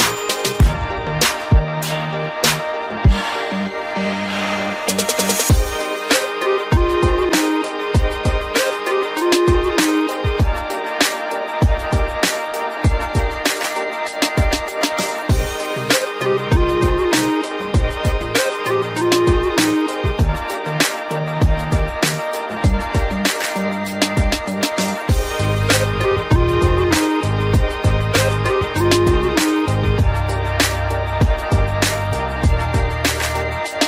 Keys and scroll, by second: 4.7 ctrl+g, 5.6 ctrl+alt+shift+e.